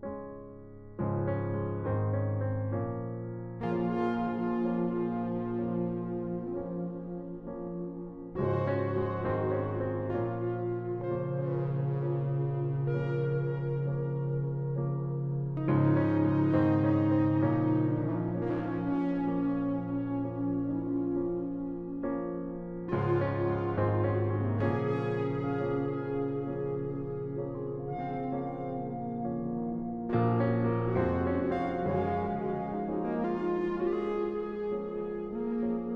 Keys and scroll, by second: 3.3 ctrl+alt+z, 32.7 ctrl+z.